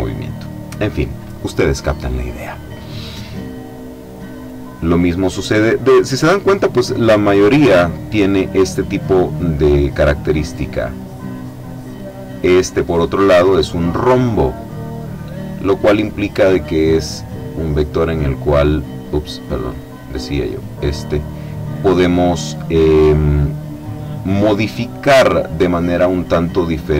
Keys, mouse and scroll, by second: 4.3 click, 8.9-11.8 drag, 12.2 click, 17.3-19.8 drag, 19.9 click, 20.8 click, 22.1 click, 25.0 click, 26.6-26.9 drag.